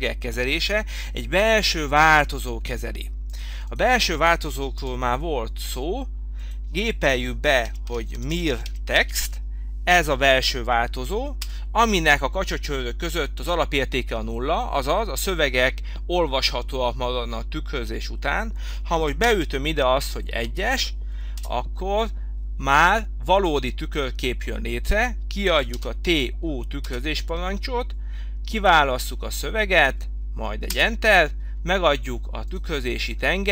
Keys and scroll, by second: 4.9 Delete, 11.5 Return, 21.6 Return, 27.1 Return, 27.7 Return, 30.9 Return.